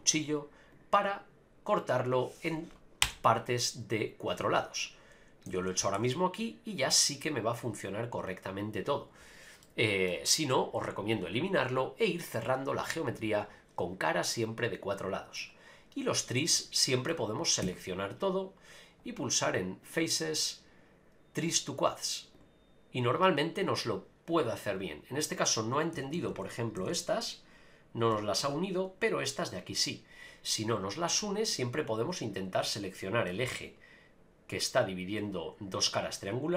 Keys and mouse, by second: 5.5 a, 5.6 a, 5.9 ctrl+r, 9.6 middle click, 14.3-15.3 middle drag, 16.5 middle click, 17.6 a, 19.9-22.4 drag, 25.9-26.9 typing, 28.4 ctrl+r, 31.6 click, 32.9 middle click.